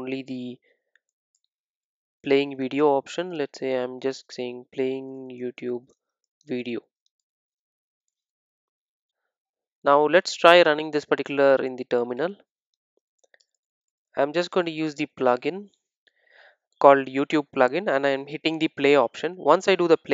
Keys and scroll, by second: 1.4 Return, 5.4 Return, 8.8 super+s.